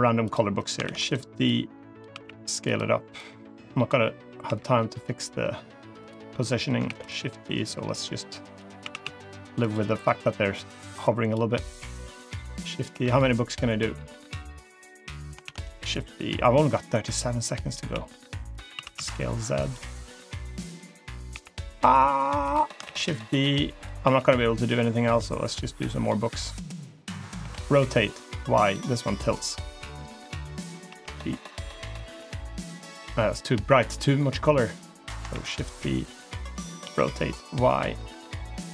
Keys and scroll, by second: 0.7 shift+d, 2.0 s, 4.3 g, 6.7 shift+d, 8.7 s, 12.8 g, 15.3 shift+d, 17.8 s, 18.6 s, 21.2 g, 22.7 shift+d, 23.9 s, 27.2 r, 30.7 g, 35.2 shift+d, 36.7 r.